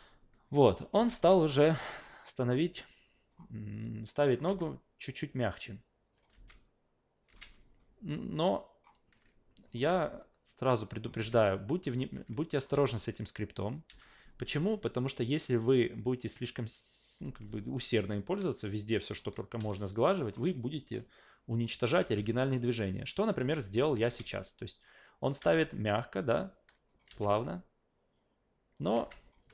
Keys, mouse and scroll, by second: 0.9 alt+shift+v, 1.2 shift+q, 1.4 shift+click, 3.3 shift+click, 4.1 shift+click, 4.5 shift+f, 5.4 shift+click, 6.1 shift+click, 7.3 alt+shift+v, 7.5-8.8 alt+shift+drag, 9.7 shift+click, 9.9 alt+shift+v, 11.2 alt+shift+v, 11.5-11.8 alt+shift+middle drag, 12.5 shift+click, 12.7 alt+shift+v, 13.9 alt+shift+v, 14.3-17.2 shift+drag, 17.6-19.2 alt+shift+middle drag, 20.2 shift+click, 22.0 alt+shift+v, 23.4 alt+shift+v, 23.7 shift+click, 24.0 alt+shift+v, 25.4 alt+shift+v, 25.5-26.2 alt+shift+drag, 26.9 shift+click, 27.1 alt+shift+v, 28.9 alt+shift+v, 29.2 shift+click.